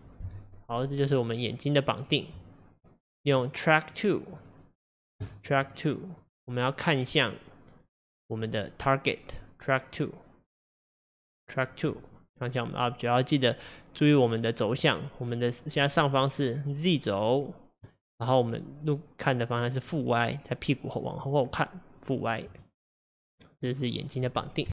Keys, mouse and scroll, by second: 1.1-3.3 middle drag, 3.3 click, 4.4 click, 5.7 click, 6.2 click, 10.8-12.1 drag, 13.6-16.7 scroll up 1, 22.3-24.7 middle drag.